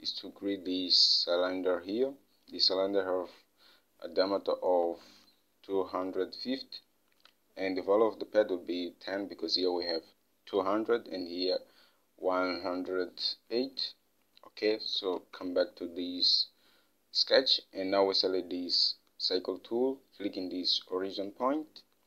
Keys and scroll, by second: 15.6 alt+Tab.